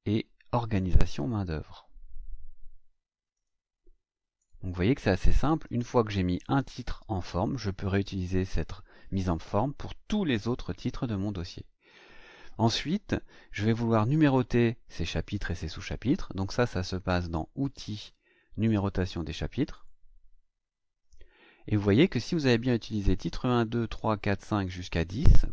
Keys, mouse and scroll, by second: 1.2 scroll down 1, 3.3 click, 4.4 click, 5.6 click, 7.5-7.8 scroll up 1, 10.1-10.4 scroll up 1, 10.6 scroll up 1, 17.6 click, 19.7 click.